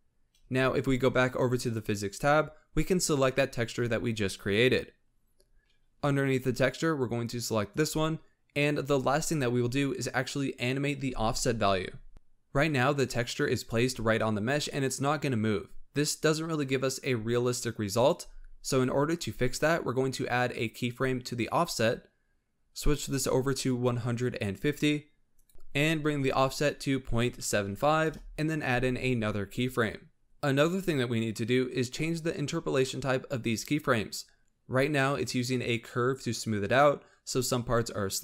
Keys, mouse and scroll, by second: 1.5 click, 2.7-3.1 scroll down 8, 6.1-9.3 drag, 20.7 click, 22.8-25.5 drag, 26.3-29.3 drag, 29.6 click, 30.2-32.4 drag.